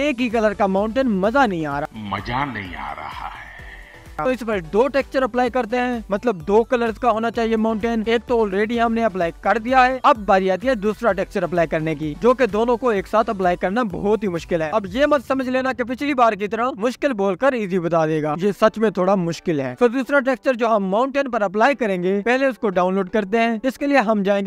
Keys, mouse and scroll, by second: 1.9-2.5 scroll up 1, 4.6 scroll up 2, 6.0 KP_0, 6.8 KP_0, 7.8 KP_Decimal, 8.7-10.2 scroll up 1, 10.2-14.7 drag, 14.7 Tab, 18.6 u, 19.6 Tab, 20.1-20.6 scroll down 2, 22.0 click, 22.4 Tab.